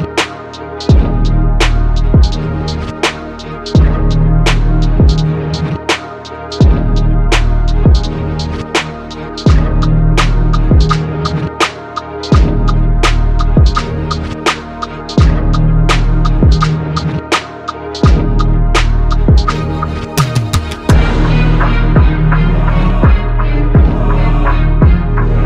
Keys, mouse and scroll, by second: 2.9 middle click, 3.7 middle click, 4.7 middle click, 8.6 e, 11.2 middle click, 11.6 middle click, 11.8 middle click, 12.4 right click, 13.2 i, 16.7 ctrl+z, 17.7 i, 19.4 middle click, 21.7 i.